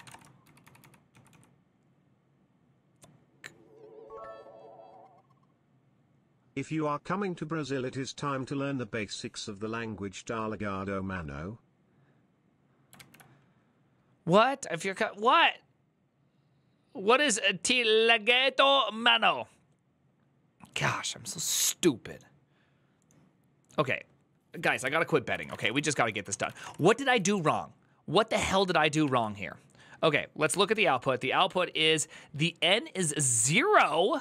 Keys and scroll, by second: 0.0-1.5 typing, 12.8 alt++, 24.7 alt+{, 25.0-27.6 typing, 28.1 ctrl+t, 28.8 ctrl+n, 30.2-31.0 typing, 33.2 typing.